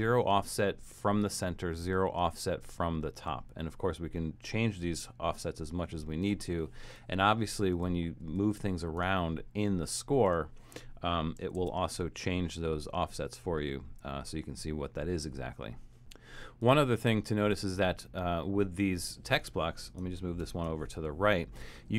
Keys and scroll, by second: 11.5 shift+Return, 20.4 shift+super+}.